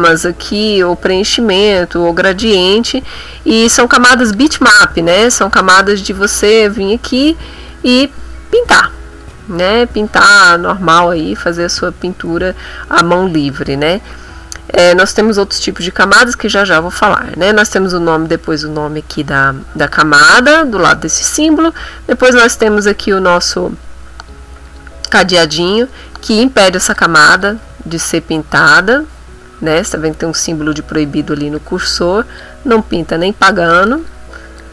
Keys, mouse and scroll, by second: 4.0 shift+click, 5.3 click, 5.8 click, 7.7 ctrl+z, 9.2 click, 10.5 click, 11.4 ctrl+z, 22.0 click, 24.0 click, 24.6 click, 27.0 click, 27.6 ctrl+z, 28.5 click, 31.6 click, 34.0 click, 34.6 click.